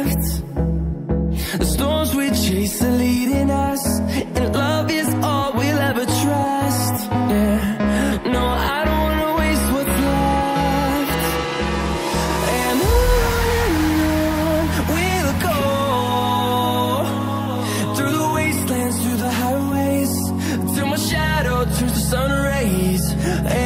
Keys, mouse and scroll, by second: 0.1-1.3 scroll up 1, 1.3 click, 3.9-4.3 scroll down 1, 4.6 scroll up 1, 5.5 click, 5.6 double click, 7.3 click, 17.9 click, 19.2-19.8 scroll down 1, 19.8 click, 19.9 double click, 22.0 click, 23.0-23.4 scroll down 1, 23.4-23.6 scroll up 1.